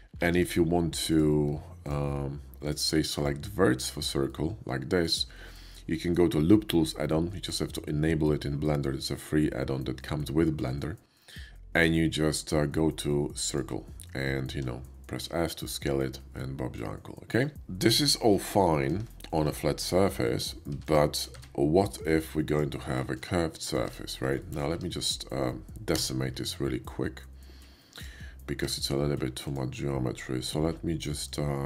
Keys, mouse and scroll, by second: 0.2 ctrl+z, 0.9 click, 1.8 ctrl+click, 2.7 ctrl+click, 3.1 ctrl+click, 3.8 ctrl+click, 4.1 ctrl+middle click, 6.0 ctrl+right click, 13.3 click, 14.5 s, 15.6 click, 16.3-17.4 middle drag, 18.3 ctrl+z, 18.8 ctrl+middle click, 18.8 ctrl+z, 19.2 Tab, 19.5 ctrl+z, 20.0 shift+middle click, 20.2 shift+middle click, 20.7 x, 20.7 s, 20.8 click, 21.3 shift+a, 22.4 click, 22.9 middle drag, 23.4 shift+middle click, 23.8 Tab, 24.4 middle drag, 25.8 q, 27.8 click, 28.9 ctrl+`, 29.4 click, 31.2 ctrl+`, 31.2 click.